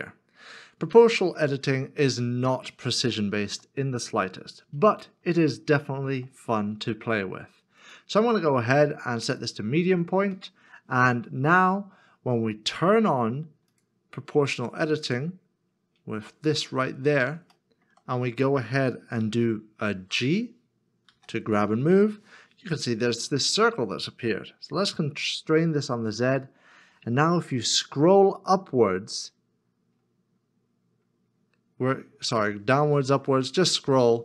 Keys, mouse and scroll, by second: 2.5 shift+middle click, 3.1 shift+middle click, 10.4 middle click, 17.6 shift+middle click, 18.0-18.9 shift+scroll down 1, 18.9 scroll down 1, 19.0 middle click, 19.6-20.9 shift+scroll up 1, 24.8 z, 29.5-29.9 scroll up 1, 29.9-31.6 scroll down 1.